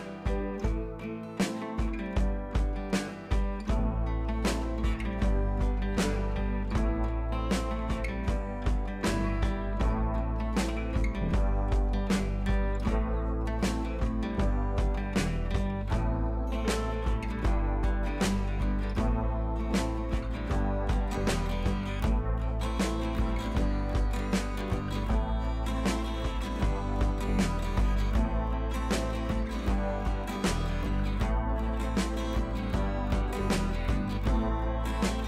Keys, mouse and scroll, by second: 1.5 click, 4.5 Up, 5.1 click, 7.2-8.6 drag, 17.3 click, 19.3 click, 20.2 scroll down 1, 21.3-21.7 click, 21.9 ctrl+c, 22.5 click, 23.0 t, 23.4 click, 24.1 ctrl+v, 24.9 click, 25.7-26.8 typing, 28.3 click, 28.5 ctrl+t, 29.1-29.6 click, 29.9-30.5 scroll up 1, 34.1-34.8 click, 34.9-35.2 scroll up 2.